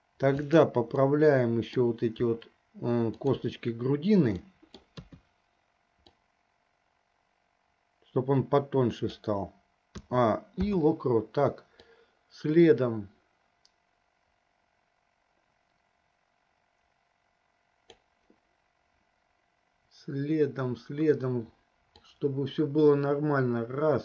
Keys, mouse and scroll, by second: 0.6 click, 1.3 middle click, 3.4 shift+click, 4.7 middle click, 5.4 KP_3, 6.5-9.6 drag, 10.3 a, 11.0 i, 12.2-18.4 drag, 22.2-24.0 drag.